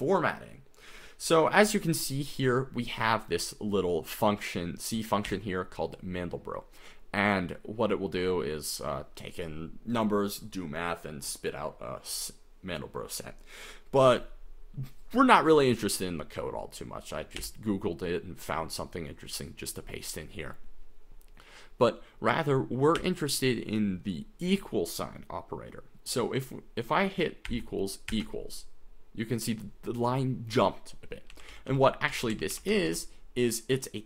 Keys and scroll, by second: 2.3 j, 5.5 j, 17.6 j, 18.0 k, 23.2 j, 27.6 =, 28.1 =, 28.1 F10, 31.1-34.0 typing.